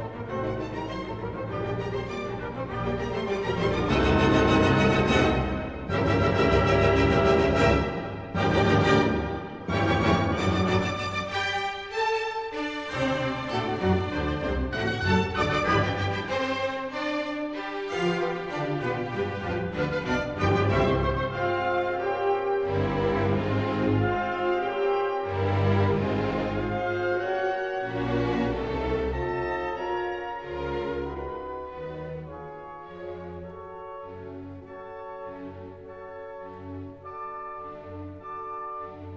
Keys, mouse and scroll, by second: 0.5 right click, 2.3 click, 3.4 s, 5.3 click, 6.5-7.6 drag, 7.7-8.8 drag, 9.2 Escape, 9.8 s, 11.0-12.1 drag, 12.9 click, 14.3-14.7 typing, 15.9 Return, 18.1 click, 19.3-19.7 scroll, 22.1 click, 22.9-23.6 scroll, 24.6 click, 27.2 click, 28.2 click, 37.6-38.7 drag.